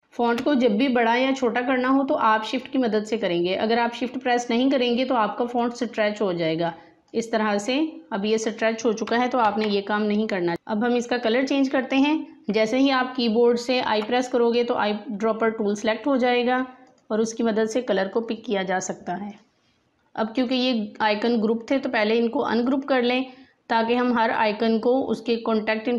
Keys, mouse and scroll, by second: 0.0 click, 1.4-5.1 drag, 5.4-9.4 drag, 9.4 ctrl+z, 12.5 click, 13.7 i, 16.8 click, 21.6 right click, 22.6 click.